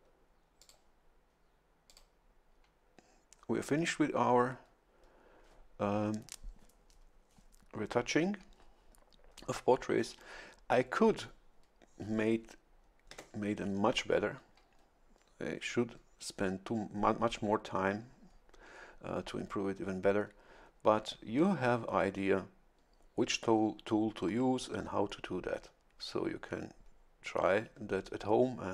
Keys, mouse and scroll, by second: 0.6 click, 1.9 click, 13.1 Tab.